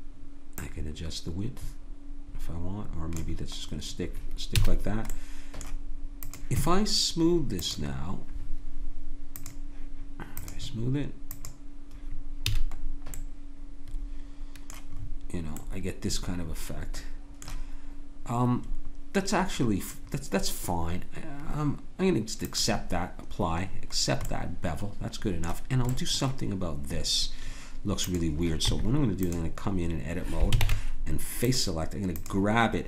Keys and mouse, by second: 4.6 a, 5.1 click, 6.2-9.4 drag, 12.5 a, 12.8-14.4 middle drag, 14.9 middle click, 15.5-17.7 drag, 22.4-24.3 drag, 24.3 middle click, 26.1-28.6 drag, 28.6 Tab, 30.6 ctrl+Tab.